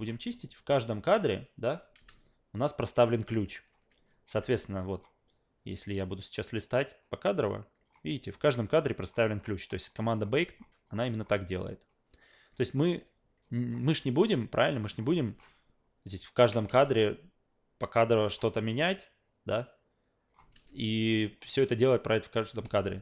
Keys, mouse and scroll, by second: 0.1 alt+middle click, 1.2 click, 2.0 f, 2.7 click, 3.5 alt+middle click, 4.0 click, 4.3 f, 4.9 click, 7.3 click, 7.7 click, 8.2 click, 8.5 click, 8.9 click, 9.2 click, 9.6 click, 10.0 click, 10.4 click, 10.7 click, 11.1 click, 12.6 alt+middle click, 13.4 drag, 13.9 w, 14.5-15.0 drag, 15.1 w, 15.4-16.5 shift+middle drag, 16.7 ctrl+z, 17.9-18.3 drag, 18.4 w, 18.6-20.3 middle drag, 20.5 ctrl+z, 21.4 alt+middle click, 22.7 ctrl+z.